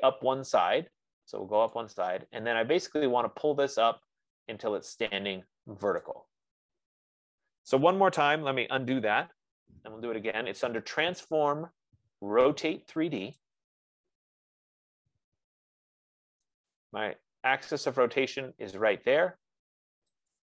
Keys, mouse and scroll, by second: 2.3 click, 6.4 click, 9.1 ctrl+z, 11.6 click, 13.8 click, 13.9 F15, 17.0 click.